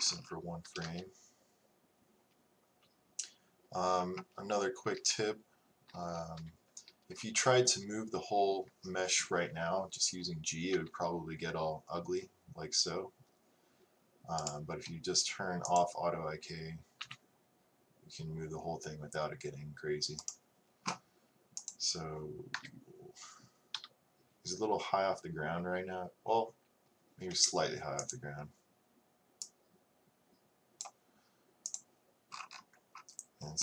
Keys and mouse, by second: 0.7 a, 6.4 t, 15.7-17.8 drag, 17.0 g, 22.4-23.7 drag, 22.6 KP_1, 23.8 KP_3, 28.1-33.6 drag.